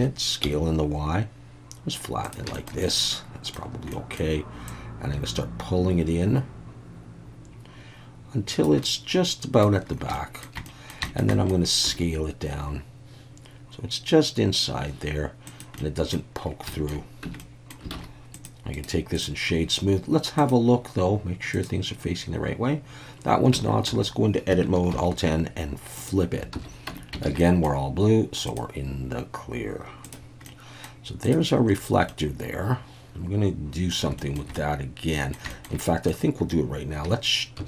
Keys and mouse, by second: 0.4 s, 0.4 y, 2.2 click, 2.5 shift+middle click, 2.8 middle click, 3.9 middle click, 4.7-8.6 drag, 8.8 middle click, 10.2 shift+middle click, 10.7 middle click, 11.1 shift+middle click, 11.3 shift+middle click, 11.9 s, 15.4 click, 15.8 middle click, 16.7 shift+middle click, 17.3 Tab, 17.4-17.7 middle drag, 17.9 alt+a, 18.4 click, 18.8 right click, 20.4-21.8 drag, 23.6 Tab, 23.9 a, 24.9 alt+n, 26.5 alt+a, 26.9 Tab, 27.3 alt+a, 27.4 middle drag, 28.5-30.2 drag, 30.4 middle click, 32.1-33.9 middle drag, 34.2 shift+middle drag, 34.5-35.3 middle drag, 35.5 shift+middle click, 35.8 middle click, 37.6 shift+d.